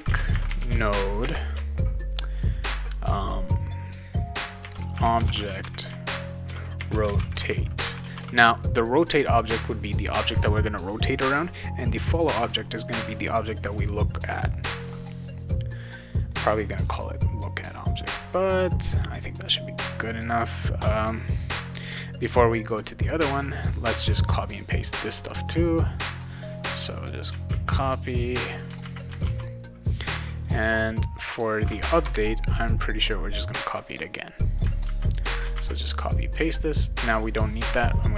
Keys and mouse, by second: 0.0-1.2 typing, 4.3-8.3 typing, 16.1 click, 16.3 click, 25.5 click, 26.3 click, 27.5 ctrl+c, 28.3 click, 28.8 ctrl+v, 29.2 ctrl+s, 30.4 click, 31.7 click, 32.0 Return, 33.6 click, 34.8 ctrl+c, 35.3 click, 35.5 ctrl+v, 37.1 click.